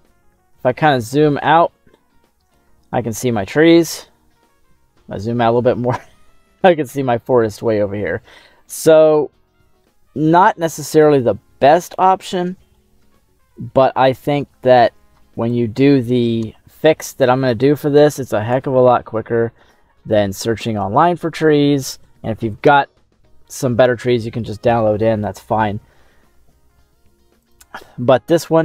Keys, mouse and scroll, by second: 0.3 scroll up 1, 0.6 middle click, 0.6 scroll down 1, 1.3-1.6 scroll down 2, 1.7 middle click, 3.9 shift+middle click, 4.6-5.4 scroll down 5, 5.4-6.9 middle drag, 7.7-8.7 middle drag, 8.8-10.7 scroll up 9, 10.8-11.8 middle drag, 11.9 shift+middle click, 12.8 scroll down 1, 13.0 shift+middle click, 13.7 scroll up 3, 14.2 shift+middle click, 15.5 right click, 17.5-18.5 drag, 18.9 middle click, 20.2 shift+middle click.